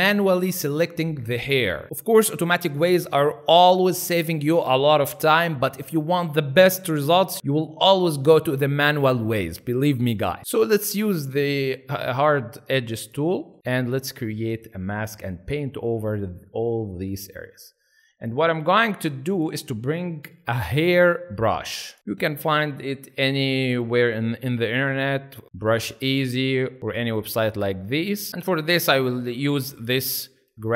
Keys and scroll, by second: 13.4 ctrl+z, 20.3 b, 22.0 typing, 23.2 r.